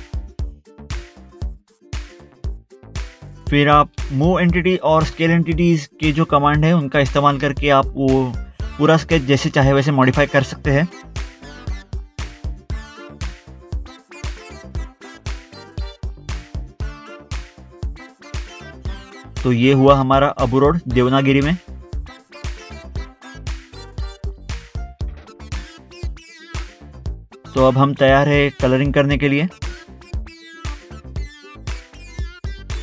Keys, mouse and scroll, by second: 0.1 scroll down 1, 1.1 click, 1.7 ctrl+v, 2.5 scroll down 1, 4.1 scroll up 1, 4.3 scroll down 1, 4.5 scroll up 2, 5.3 scroll up 1, 5.6 scroll down 1, 5.8 click, 6.0 click, 6.1 click, 6.3 scroll down 1, 7.6 scroll down 1, 8.1 scroll up 1, 10.0 scroll down 1, 10.5 scroll, 10.6 click, 10.7 scroll up 1, 11.3 click, 11.5 click, 11.8 click, 12.1 scroll up 1, 12.2 scroll down 1, 13.1 scroll up 1, 13.8 click, 14.2 click, 14.4 Delete, 14.6 scroll up 1, 15.2 click, 16.1 click, 16.1 scroll up 1, 16.2 middle click, 16.7 scroll down 1, 17.1 scroll up 1, 17.2 scroll down 1, 17.7 scroll up 1, 17.9 scroll down 1, 18.2 click, 20.7 scroll down 1, 21.1 scroll up 1, 21.2 scroll down 1, 21.3 scroll up 1, 21.4 scroll down 1, 23.0 scroll up 1, 24.0 middle click, 24.1 middle click, 24.2 scroll up 1, 24.3 scroll down 1, 24.6 middle click, 24.9 middle click, 25.1 scroll up 1, 25.5 click, 25.6 scroll up 1, 25.8 middle click, 26.0 middle click, 26.1 click, 26.4 middle click, 30.1 middle click, 30.8 scroll down 1.